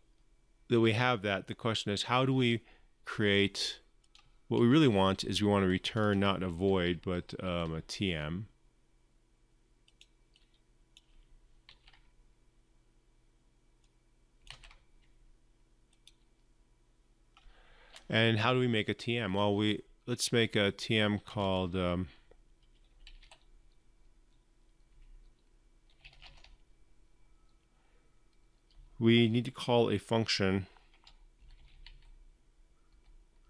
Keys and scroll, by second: 11.5 ctrl+c, 14.3 ctrl+v.